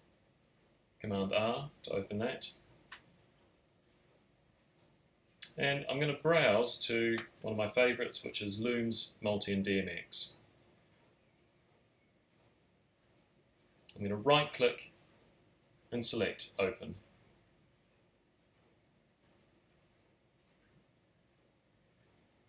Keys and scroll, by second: 3.9 super+r.